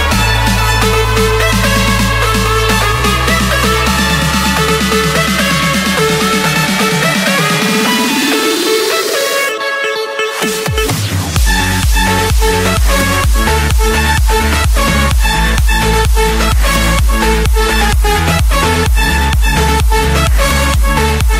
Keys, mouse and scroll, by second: 0.4 click, 2.0 click, 2.4-3.3 scroll up 13, 6.7-7.9 drag, 8.5 click, 8.8-9.6 scroll, 12.5 click, 12.9 Escape.